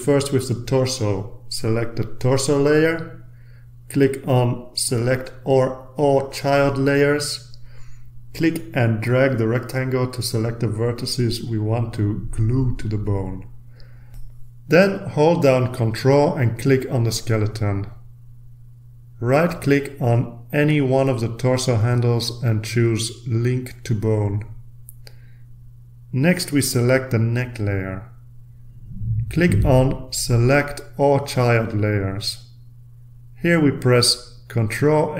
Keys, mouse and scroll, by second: 0.9-1.7 scroll down 2, 3.6 click, 6.1-7.1 drag, 9.3-13.8 drag, 15.7 ctrl+click, 16.8 ctrl+click, 21.3 middle click, 24.4 click, 28.2 click, 30.2 click, 32.2 click, 34.7 ctrl+a.